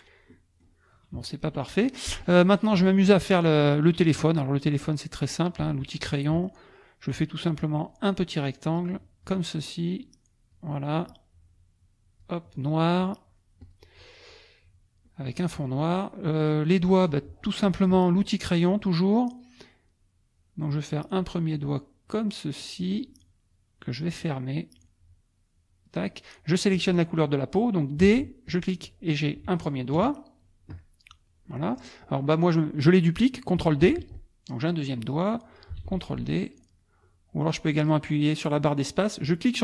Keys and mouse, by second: 0.3 click, 1.1 KP_Subtract, 5.6 click, 7.6 click, 8.6 click, 9.9 click, 11.1-12.4 drag, 13.6 click, 15.0 click, 21.2-23.0 drag, 24.8-26.0 drag, 28.0 d, 28.5 click, 29.4 F1, 29.9 KP_Add, 31.1 click, 31.1 right click, 33.8 ctrl+d, 34.1-35.8 ctrl+drag, 35.8 ctrl+d, 36.1-38.0 ctrl+drag, 39.2-39.6 drag.